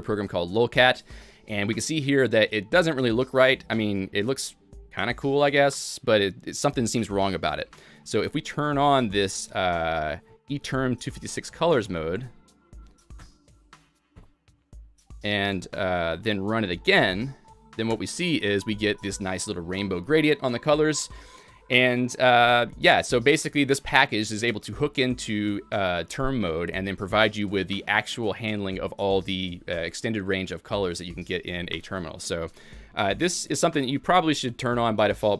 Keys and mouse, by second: 2.2-2.9 typing, 2.4 click, 5.2-9.2 typing, 5.5 click, 7.1 click, 7.9 click, 8.7 click, 10.5 click, 10.5 alt+x, 10.9-11.6 typing, 11.1 click, 11.9 Escape, 12.2 alt+x, 13.2 Return, 14.2-21.3 typing, 15.2 click, 16.3 Escape, 16.3 alt+x, 16.3 Return, 16.3 shift+Insert, 16.3 click, 17.6 click, 19.2 click, 20.8 click, 23.8-24.5 typing, 24.0 click, 27.0-27.7 typing, 27.2 click, 30.2-30.9 typing, 30.4 click, 32.9 click, 33.1 click, 33.3-34.0 typing, 33.7 click.